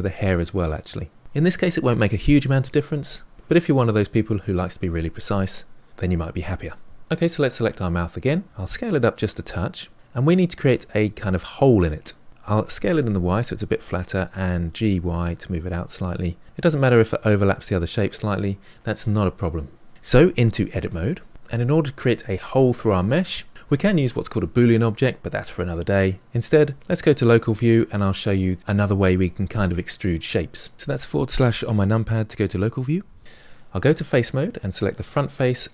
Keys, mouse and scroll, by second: 0.2 click, 7.0-7.5 scroll up 3, 7.5 click, 8.4 s, 9.9-12.3 middle drag, 12.4 s, 14.7 g, 20.8 Tab, 27.3 KP_Divide, 31.0-32.2 scroll down 2, 32.2 click, 33.2 a, 34.2 click, 34.9 click, 35.6-35.7 middle drag.